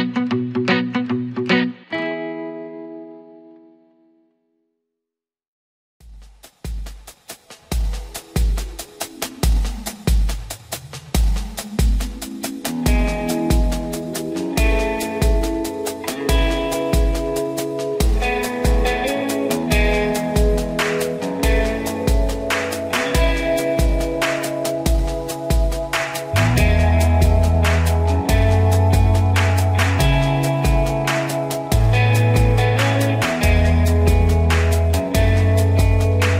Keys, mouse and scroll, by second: 0.7 click, 4.3-10.0 drag, 14.5 ctrl+=, 15.0 ctrl+-, 16.6-21.5 drag, 21.5-28.9 shift+drag, 28.9-33.9 shift+drag.